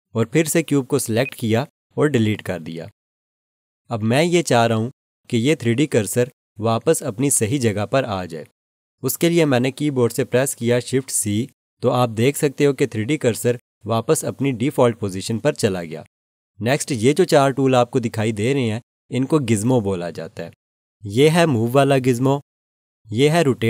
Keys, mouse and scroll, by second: 2.6 Delete, 11.1 shift+c.